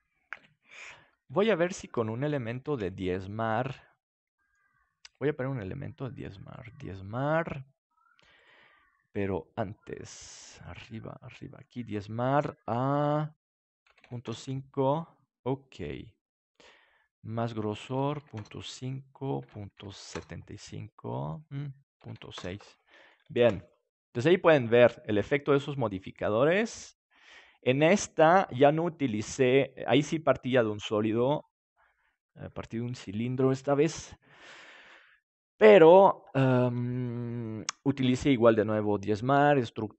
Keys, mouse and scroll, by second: 1.3 Tab, 2.6 ctrl+s, 3.3-4.7 middle drag, 6.5-8.3 drag, 9.8-13.0 drag, 13.7-15.4 drag, 15.4 middle click, 17.7-20.9 drag, 20.8 middle click, 21.8-23.9 drag, 21.8-23.9 middle drag, 21.8-23.9 right drag, 23.3 ctrl+s.